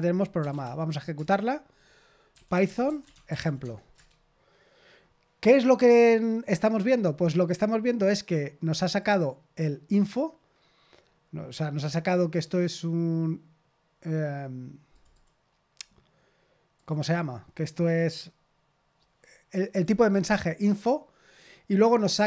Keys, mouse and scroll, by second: 0.1-0.9 typing, 1.1 Return, 2.0-3.9 typing, 3.9 Return, 16.7-22.2 drag.